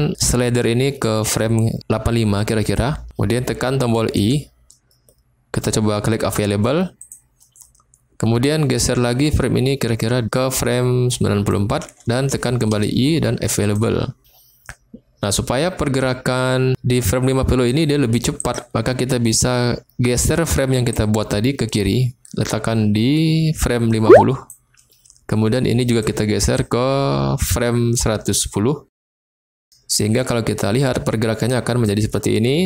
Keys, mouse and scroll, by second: 4.2 i, 8.8-11.5 drag, 12.7 i, 16.0-16.7 drag, 18.4 click, 20.2 click, 20.9-24.4 drag, 25.9 click, 26.5-28.3 drag, 30.1 click.